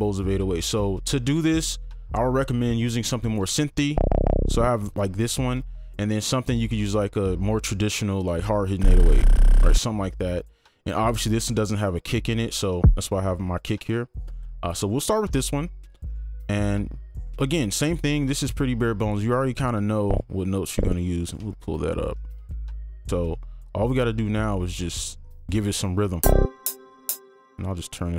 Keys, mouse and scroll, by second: 3.9 ctrl+click, 8.7 ctrl+2, 8.8 ctrl+click, 9.2 ctrl+double click, 9.4 ctrl+click, 12.7 ctrl+2, 12.8 ctrl+click, 16.1 right click, 18.1-20.1 scroll down 1, 21.2 click, 21.6 ctrl+Up, 21.6 click, 22.3 ctrl+a, 22.8-23.7 scroll up 2, 23.7 alt+scroll up 2, 24.5 right click, 24.5-25.2 scroll, 25.2 double click, 27.2 space.